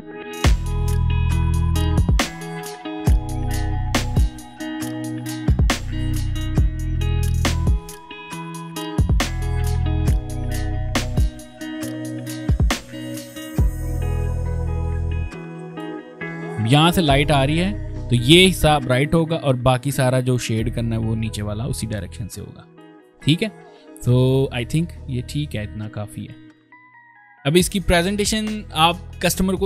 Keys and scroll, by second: 2.2-2.6 ctrl+[, 3.4 space, 3.6 p, 4.4 ctrl+z, 5.5-6.7 typing, 8.6 v, 8.8 shift+m, 9.1 v, 9.3-9.7 ctrl+[, 9.8 ctrl+space, 10.1 ctrl+space, 10.5 p, 12.0 v, 12.3 v, 12.3 m, 12.3 space, 13.7 ctrl+space, 14.1 ctrl+space, 14.9 ctrl+b, 14.9 ctrl+space, 15.4 ctrl+z, 15.8 ctrl+space, 22.9 ctrl+z, 23.5 ctrl+space, 24.1 v, 24.6 ctrl+space, 25.3 ctrl+space, 27.2 ctrl+z, 27.6 ctrl+c.